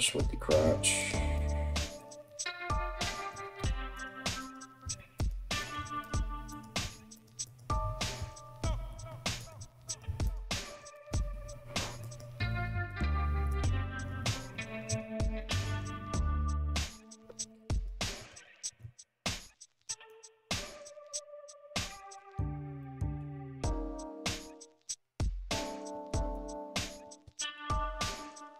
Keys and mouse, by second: 0.1 right click, 0.2 middle click, 0.2 g, 0.9 right click, 1.0-3.5 middle drag, 1.1 g, 2.3 g, 3.5 right click, 3.6 middle click, 3.8 g, 4.0 right click, 4.2-6.4 middle drag, 4.4 g, 5.2 right click, 5.4 g, 6.1-7.2 right drag, 6.4 g, 7.2-10.1 middle drag, 7.8 g, 9.5 right click, 9.6 g, 10.1 right click, 10.3-28.5 middle drag, 10.3 g, 11.6 right click, 12.1 g, 13.1 right click, 13.3 g, 17.1 alt+z, 17.3 right click, 17.9 ctrl+z, 18.7 ctrl+z, 19.5 shift+z, 25.7 ctrl+shift+z.